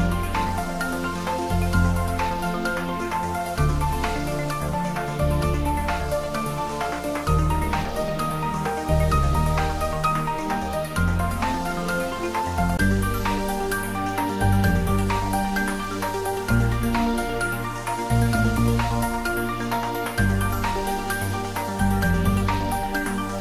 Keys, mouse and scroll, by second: 2.6 Tab, 11.2 r, 11.9 1, 12.5 8, 12.9 0, 14.6 click, 15.8-17.2 typing, 18.0 click, 18.9-22.3 middle drag, 22.3 click.